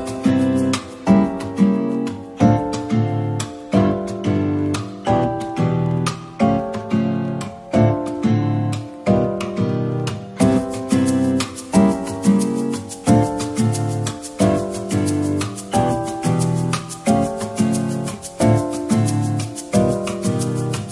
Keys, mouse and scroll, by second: 2.0-2.8 scroll down 1, 4.5 middle click, 5.3-6.4 scroll up 1, 7.4 shift+click, 9.2 ctrl+j, 11.8-12.3 scroll down 1, 14.4 scroll down 1, 20.3 scroll up 1.